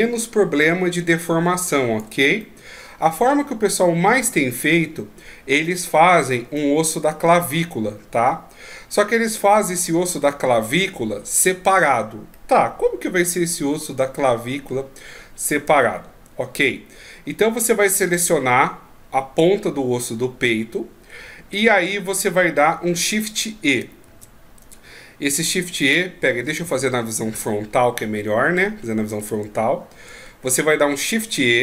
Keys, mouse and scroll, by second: 2.4 middle click, 6.5 middle click, 12.3 middle click, 15.9-16.6 shift+scroll up 1, 16.6-19.2 scroll up 5, 20.7-21.3 scroll down 3, 24.1 shift+e, 26.6 ctrl+z, 27.3 KP_1, 28.4-29.5 ctrl+scroll up 4, 29.5-30.2 shift+scroll up 6.